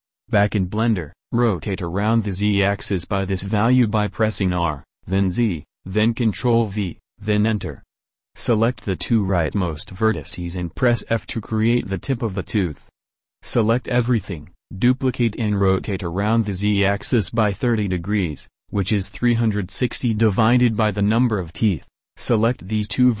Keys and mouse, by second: 2.3 r, 8.6-10.3 drag, 10.3 f, 13.2 a, 13.4 a, 14.4 shift+d, 16.8 \, 22.9 shift+s.